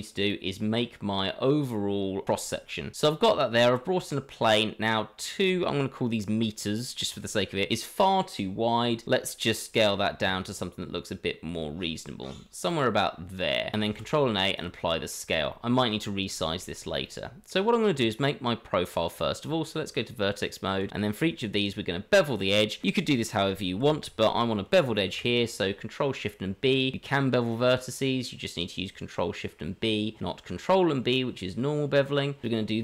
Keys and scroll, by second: 9.7 s, 17.9 Tab, 20.8 a, 24.8 ctrl+shift+b.